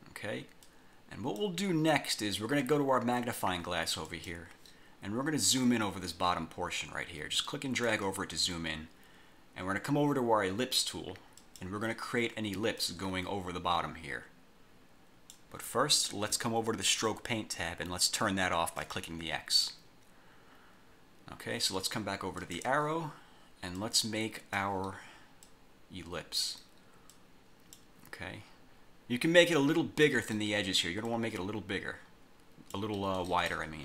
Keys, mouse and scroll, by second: 0.8 click, 4.2 click, 5.6-8.2 drag, 11.5 click, 12.9-15.7 drag, 16.9 click, 18.9 click, 22.5 click, 23.9 click, 25.5 click, 27.2 click, 29.3 click, 31.2-33.1 drag.